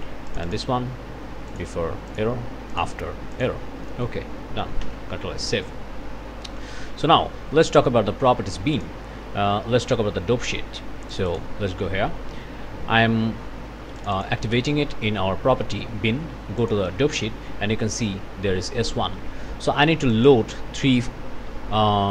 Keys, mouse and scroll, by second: 0.3 click, 1.5 click, 2.1 click, 2.7 click, 3.3 click, 3.9 click, 4.8 ctrl+s, 7.5-9.0 drag, 11.1 click, 14.0 click, 16.6 click, 20.1 click.